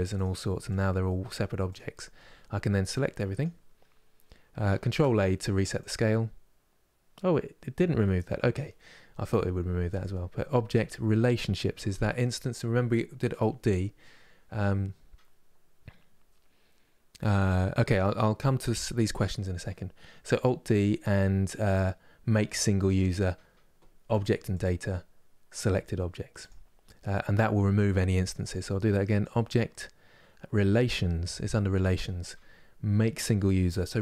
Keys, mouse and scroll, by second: 0.4 click, 0.7 middle click, 1.4 click, 1.6 middle click, 2.1-3.1 scroll down 1, 3.1 click.